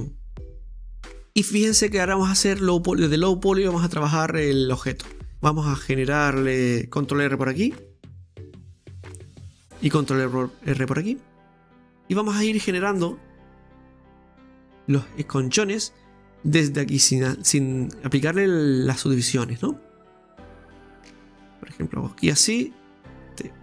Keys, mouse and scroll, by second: 0.5 right click, 1.2-2.5 middle drag, 2.5-3.1 scroll up 1, 3.1-5.3 middle drag, 5.3 Tab, 5.7-7.5 middle drag, 7.5 ctrl+r, 10.1 ctrl+r, 14.1-15.4 scroll up 2, 15.5 right click, 16.2 shift+right click, 17.3 g, 19.9-22.9 drag, 23.1 right click.